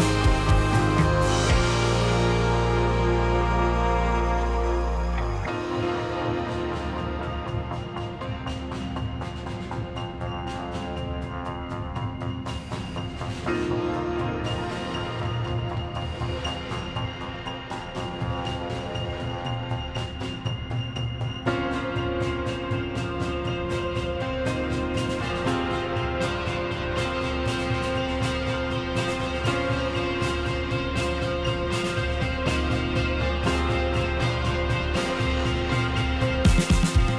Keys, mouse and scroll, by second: 2.7-3.4 drag, 3.4-5.0 middle drag, 5.0 `, 6.5 Tab, 6.8 e, 7.7 Tab, 8.3 e, 9.8-16.3 typing, 19.0 Tab, 20.0 right click, 20.9 click, 21.5-22.4 scroll down 4, 22.4-23.9 drag, 24.1 click, 24.7-25.8 middle drag, 26.1-26.4 scroll up 1, 26.4 click, 27.1 click, 27.5-28.5 drag, 28.8 click, 29.8 click, 30.0-30.6 right drag, 30.6 click, 30.8-31.5 middle drag, 31.5 scroll down 2, 31.7-33.1 middle drag, 33.1 click, 33.6 click, 34.1 `, 35.0-36.0 scroll up 1, 36.0 alt+d.